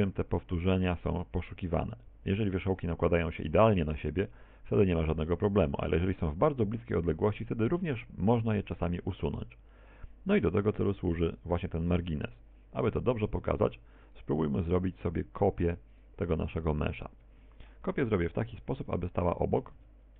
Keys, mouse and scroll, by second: 19.7 right click.